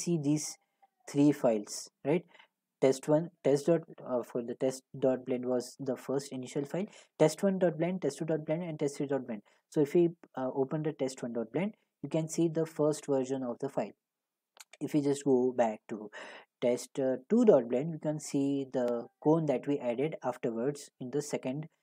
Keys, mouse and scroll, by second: 0.2-1.3 ctrl+scroll, 9.8 click, 10.0 click, 15.3 click, 17.3 click, 17.4 click.